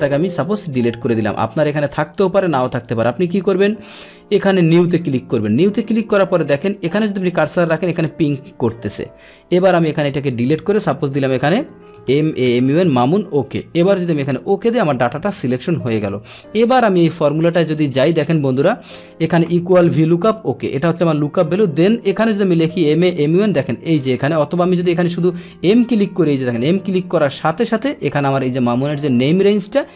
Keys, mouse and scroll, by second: 0.2 click, 0.5 Delete, 1.6 Delete, 2.0 click, 2.1 Delete, 2.7 click, 3.9 drag, 4.7 click, 7.0 click, 9.9 click, 14.2 click, 15.5-16.7 drag, 17.4 click, 19.9 Tab, 20.6 Left, 21.0 Left, 24.8 BackSpace, 27.4 click, 28.9 click, 29.1 click.